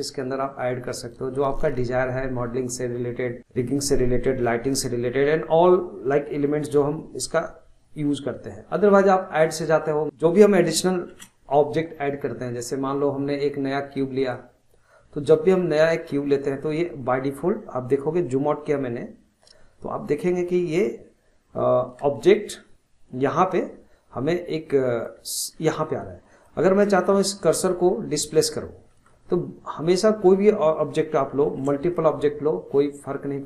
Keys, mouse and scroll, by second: 9.4-10.0 drag, 11.1 shift+a, 15.4-15.7 scroll down 5, 23.3-25.5 middle drag, 25.5 scroll down 1, 25.8-26.6 middle drag, 26.6 scroll up 2, 26.8-27.9 middle drag, 27.9-28.5 scroll down 2, 28.6 scroll down 2, 28.9-31.5 middle drag, 31.5 shift+a.